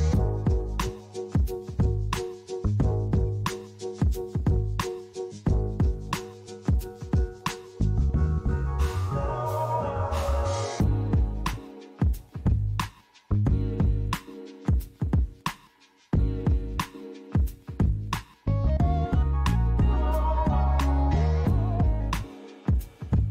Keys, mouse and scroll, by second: 3.1 click, 4.7 click, 5.8 click, 6.3 click, 7.6 click, 8.3 click, 8.9-9.6 scroll down 2, 9.6 scroll down 1, 12.2 click, 21.6-22.6 scroll up 4, 22.6 click.